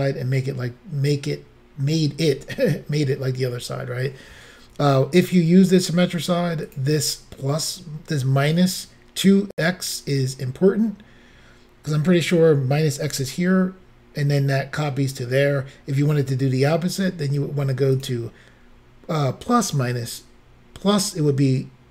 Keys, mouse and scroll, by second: 6.7 click, 17.9 click.